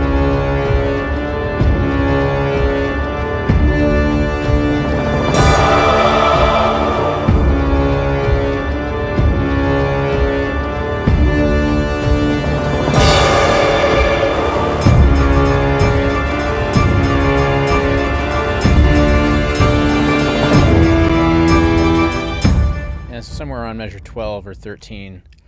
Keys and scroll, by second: 22.3 space.